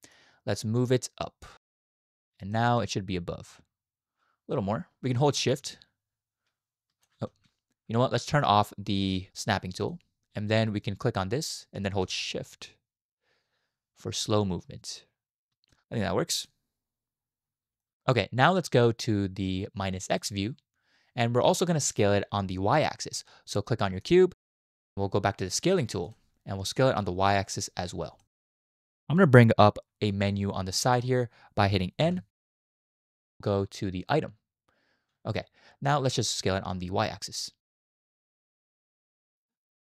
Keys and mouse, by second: 1.4 click, 2.6 shift+drag, 5.6-7.1 shift+drag, 7.3 ctrl+z, 9.8 click, 11.2-15.7 drag, 16.4 click, 17.8 shift+drag, 20.1 click, 26.1-27.5 drag, 28.2 shift+middle click, 32.0 n, 34.0 click, 37.5-38.7 drag.